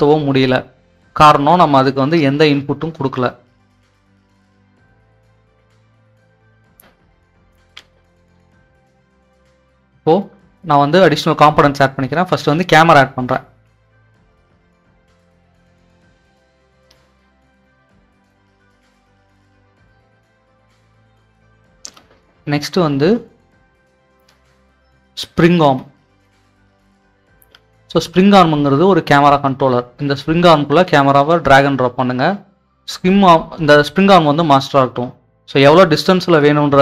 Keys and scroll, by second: 0.0 s, 3.5 Escape, 3.7 typing, 12.4-14.1 typing, 16.6-17.3 typing, 25.5-28.0 typing.